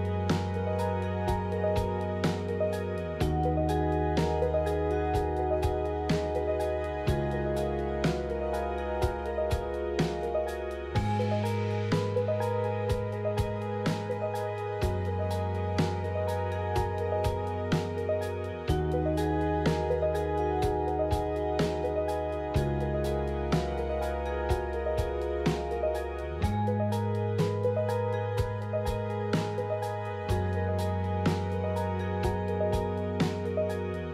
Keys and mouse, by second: 0.0 i, 0.2 middle click, 1.0 alt+click, 5.0 click, 5.6 middle click, 6.7 KP_3, 9.7 ctrl+r, 13.0 1, 13.5 alt+z, 14.5-16.3 ctrl+drag, 16.7 alt+z, 17.0 middle click, 17.7 x, 20.8 ctrl+r, 29.3-30.5 ctrl+drag, 33.0 Tab.